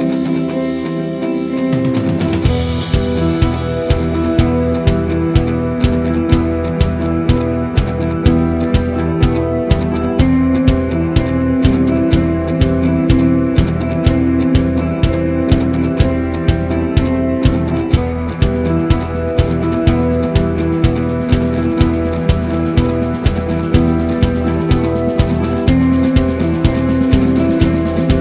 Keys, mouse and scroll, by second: 1.0 click, 1.8 click, 2.0 shift+click, 2.2 shift+click, 2.5 shift+click, 3.2 click, 3.5 shift+click, 4.0 click, 4.2 click, 4.4 shift+click, 4.6 shift+click, 4.9 shift+click, 5.3 shift+click, 5.7-8.4 middle drag, 8.4 click, 8.5-10.2 middle drag, 9.8 ctrl+z, 10.2 shift+click, 10.8-13.0 middle drag, 11.3 e, 13.0-16.0 drag, 13.2 s, 14.4 g, 16.0-17.6 middle drag, 16.6 scroll, 17.6 click, 18.0 KP_1, 18.4 click, 19.0 g, 20.3-22.3 drag, 20.8 g, 22.4-24.3 middle drag, 23.4-24.0 scroll, 24.3 click, 24.5 scroll up 1, 24.8-28.2 shift+middle drag, 27.3 scroll up 1.